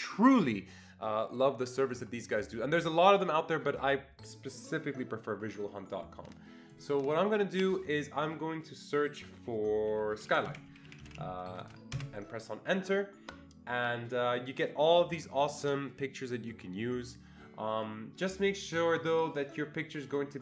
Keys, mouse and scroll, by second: 6.7-9.3 click, 9.9-11.6 typing, 10.2 click, 12.0 Return.